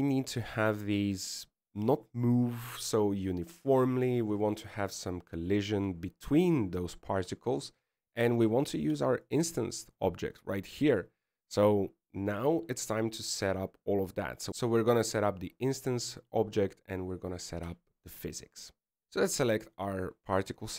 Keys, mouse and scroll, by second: 2.4 middle click, 2.9-3.4 scroll up 2, 3.4-3.9 scroll down 1, 3.9 middle click, 10.4-11.4 scroll down 1, 11.4 right click, 11.4-12.7 scroll down 2, 13.3 scroll up 1, 20.2 right click.